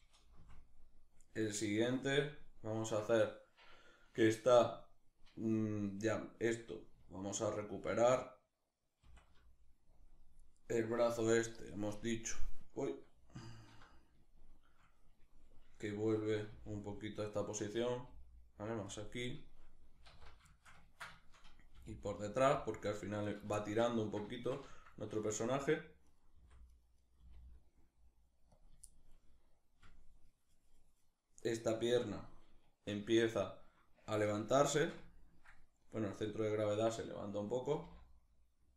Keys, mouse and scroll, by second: 0.0 Right, 5.8 right click, 8.6 alt+r, 10.0-11.6 right drag, 11.6-13.9 middle drag, 13.0 alt+q, 16.1 g, 17.5 click, 17.7 g, 18.6 click, 19.7 alt+o, 20.0 alt+q, 20.2-22.2 shift+middle drag, 21.4 g, 22.2 click, 22.9 right click, 23.2-25.7 shift+middle drag, 25.7 right click, 26.0 r, 26.6 right click, 26.8 r, 28.2 click, 28.5-31.0 shift+middle drag, 31.0 right click, 32.8-35.8 shift+middle drag, 35.8 right click, 37.3 g, 38.6 click.